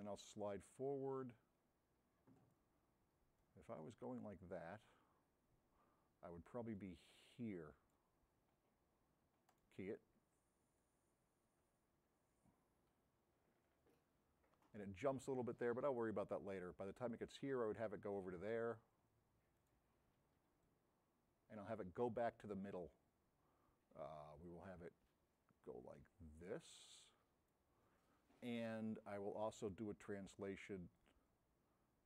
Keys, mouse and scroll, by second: 0.2-0.9 drag, 6.8-9.7 drag, 24.7-27.7 drag, 29.7 click.